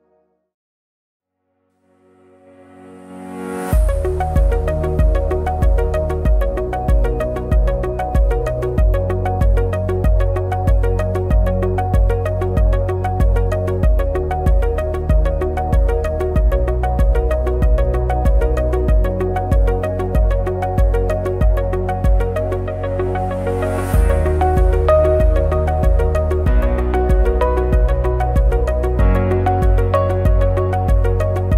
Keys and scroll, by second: 1.8 ctrl+shift+a, 2.3 ctrl+-, 2.7 ctrl+=, 3.3 ctrl+-, 3.4 ctrl+=, 4.6 shift+F12, 11.4 ctrl+c, 11.5 ctrl+f, 13.6 ctrl+c, 13.7 ctrl+f, 15.3 BackSpace, 15.6 4, 15.6 5, 17.0 ctrl+shift+a, 24.6 ctrl+shift+a, 30.5 ctrl+shift+a.